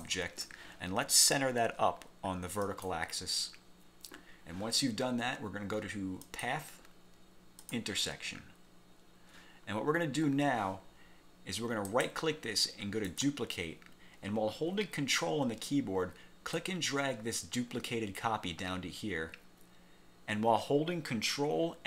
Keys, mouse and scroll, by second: 0.0 shift+click, 2.8 click, 6.4 click, 7.7 click, 12.0 right click, 13.2 click, 16.7-21.8 ctrl+drag.